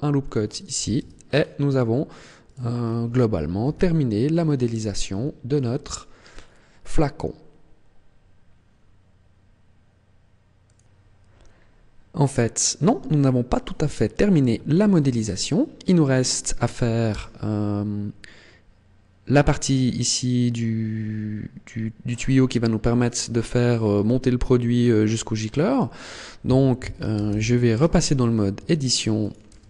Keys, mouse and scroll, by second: 0.3 click, 0.8 Tab, 1.1 scroll down 5, 2.4 right click, 2.7 scroll down 2, 3.5 KP_1, 4.2-4.5 scroll down 2, 5.0 shift+middle click, 5.8 scroll up 4, 6.3 scroll down 1, 7.1 scroll up 1, 17.0 h, 27.0 alt+h, 27.6 Tab, 28.5 Tab, 29.1 right click, 29.4 Tab.